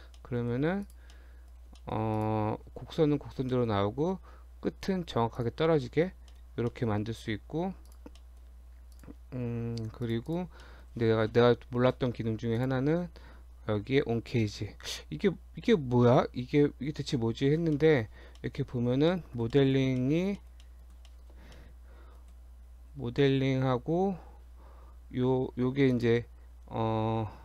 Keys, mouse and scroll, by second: 0.2 middle click, 0.7 Tab, 0.9 click, 1.2 middle click, 1.8 shift+middle click, 2.2 click, 2.5 scroll up 2, 3.5 middle click, 4.0 Tab, 5.0-5.3 scroll down 1, 5.4 click, 5.8 scroll down 1, 5.9 shift+middle click, 6.3 middle click, 6.4 scroll down 2, 6.8 shift+middle click, 7.2 scroll up 2, 7.9 click, 8.2 shift+middle click, 8.5 shift+scroll down 1, 9.0 click, 9.8 Tab, 10.1 click, 10.3 click, 10.6 shift+middle click, 12.6 click, 17.7 middle click, 17.9 scroll up 1, 18.1 Tab, 18.4 shift+middle click, 18.8 scroll up 2, 19.1 shift+middle click, 19.6 middle click, 20.0 shift+middle click, 20.2-20.7 scroll down 3, 20.4 middle click, 20.7 middle click, 21.1 shift+middle click, 21.4 shift+scroll up 2, 21.6 middle click, 22.7 scroll up 1, 26.0 click.